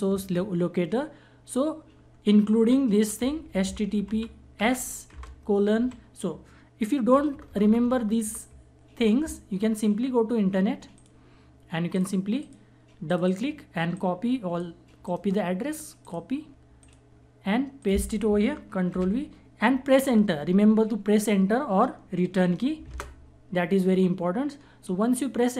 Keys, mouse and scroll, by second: 2.8-5.3 typing, 6.7 BackSpace, 10.5 click, 14.6 right click, 15.6 click, 18.5 ctrl+v, 22.4 Return.